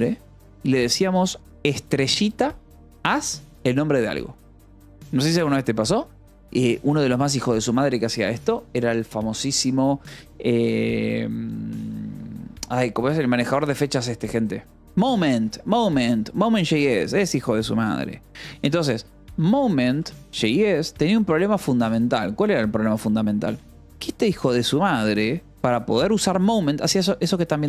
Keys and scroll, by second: 14.7 Return, 18.9-21.0 typing, 24.8 ctrl+=, 25.1 j, 25.7 j.